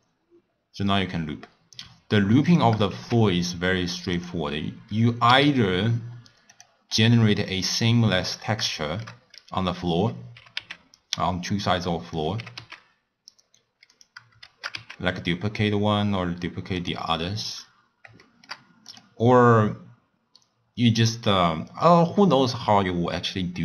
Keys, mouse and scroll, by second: 2.9 shift+a, 4.8 scroll down 1, 5.1 scroll up 1, 5.3 s, 6.9 scroll down 1, 7.1 scroll up 1, 7.3 scroll down 1, 7.5-8.0 middle drag, 8.0-8.5 scroll down 5, 8.5 scroll up 1, 8.8 shift+middle click, 9.2-10.3 scroll up 2, 10.3 g, 12.3 g, 14.4 shift+d, 17.5 scroll down 2, 18.2-18.8 shift+middle drag, 18.8 click.